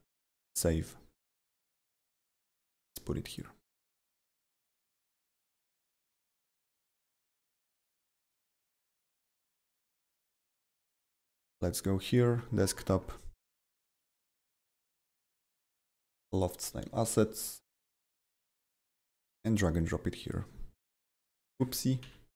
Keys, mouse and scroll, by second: 0.4 click, 2.5 click, 3.3 click, 4.5-7.9 typing, 9.2 click, 11.2 click, 12.0 click, 14.9 click, 15.0 double click, 16.2 click, 16.3 double click, 18.8-21.3 drag, 21.3-22.3 drag, 22.0 Delete.